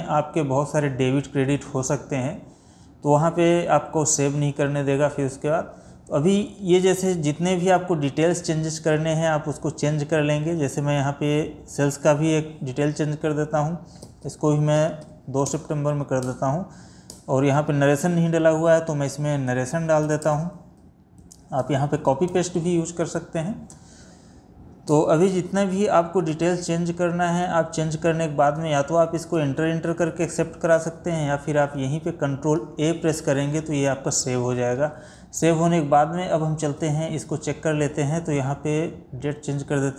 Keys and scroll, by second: 20.3 space, 32.4 ctrl+a.